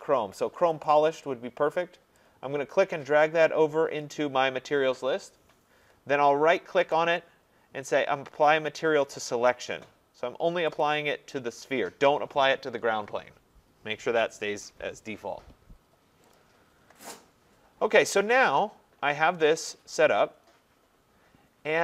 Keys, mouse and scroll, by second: 0.8 click, 1.1-2.0 scroll, 4.1 click, 6.9 right click, 9.5 middle click, 9.5 click, 10.8 click, 16.3 click.